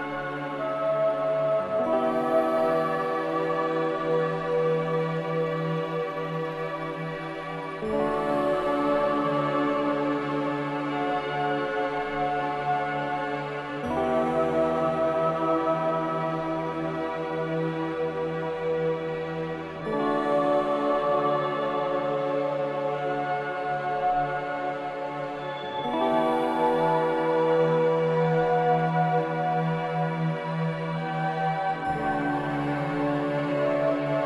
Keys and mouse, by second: 0.2 click, 0.5 click, 4.1 click, 5.2-5.6 middle drag, 6.1-6.5 middle drag, 6.5-11.3 drag, 6.5-11.3 right drag, 11.8 ctrl+z, 12.1 ctrl+z, 12.6 ctrl+z, 12.9 ctrl+z, 13.1 ctrl+z, 13.4 ctrl+z, 13.7 ctrl+z, 13.9 ctrl+z, 14.2 ctrl+z, 14.5 ctrl+z, 14.7 ctrl+z, 14.9 ctrl+z, 15.3 ctrl+z, 15.6 ctrl+z, 17.2-20.5 middle drag, 21.7 ctrl+b, 26.5-27.3 middle drag, 27.3-28.1 drag, 29.5 ctrl+r.